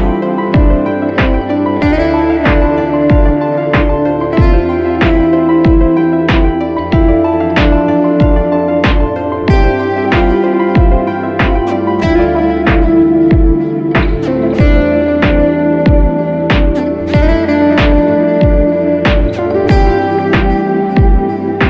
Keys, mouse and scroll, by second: 1.8 ctrl+t, 7.1 alt+shift+click, 14.2 Return, 18.8-19.1 typing.